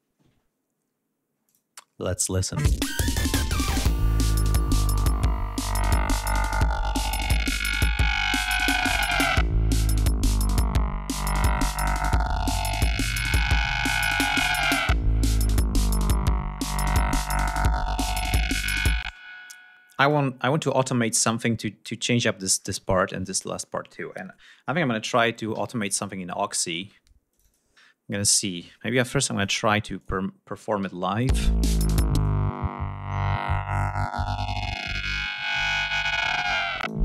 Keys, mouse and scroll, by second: 1.0 click, 2.1 space, 4.2 ctrl+scroll up 2, 4.4 ctrl+scroll down 2, 5.3 ctrl+scroll up 2, 6.2 scroll down 2, 6.7 ctrl+scroll up 2, 10.2 ctrl+scroll down 2, 10.5 ctrl+scroll up 2, 11.7-14.5 scroll down 12, 14.6-14.9 scroll up 2, 15.1 ctrl+scroll down 2, 15.7 ctrl+scroll up 3, 17.0 scroll up 2, 18.6 space, 19.6 click, 20.4-20.8 scroll up 2, 20.9 scroll down 2, 25.1 ctrl+s, 26.9 click, 28.1 click, 29.5 click, 30.8 l, 31.7 click, 33.1 click, 35.0-37.0 drag.